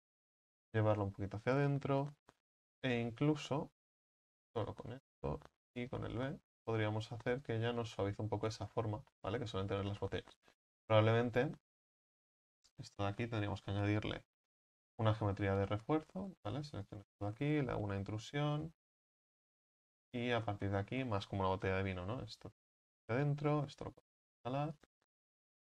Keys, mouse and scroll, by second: 0.1-4.1 drag, 4.1 right click, 4.6 alt+shift+right click, 5.9 ctrl+b, 7.8 Tab, 8.0-8.6 middle drag, 8.6-9.1 scroll down 8, 9.1-10.2 middle drag, 10.2-10.8 scroll up 6, 10.8 ctrl+z, 11.0 ctrl+z, 11.2 ctrl+z, 11.4 ctrl+z, 11.7 ctrl+z, 12.2 ctrl+z, 12.5-12.9 scroll up 5, 12.9-13.2 scroll down 3, 13.2-14.2 scroll up 1, 16.9 shift+right click, 18.2 i, 21.8-23.6 drag, 23.6 s.